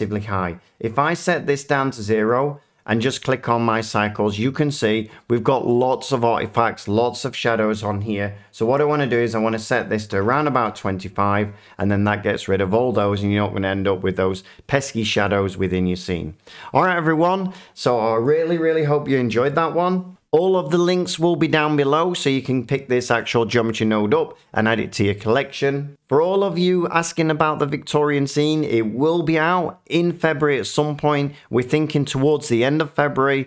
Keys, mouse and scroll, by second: 0.9 click, 2.2 click, 9.3 click, 10.1 typing, 10.6-11.3 Return, 20.1 F9.